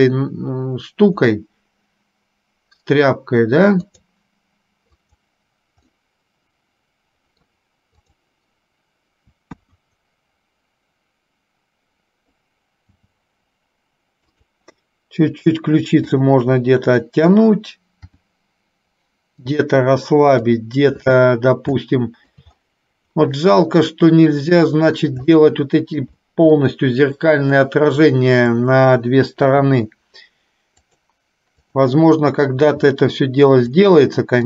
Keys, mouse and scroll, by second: 5.0 click, 6.2-7.7 middle drag, 8.2 click, 9.5 KP_1, 13.0 g, 18.2 r, 20.5 click, 21.9 shift+middle click, 23.5-24.8 middle drag, 25.5 shift+middle click, 26.8 shift+middle click, 28.7 click, 31.9 click.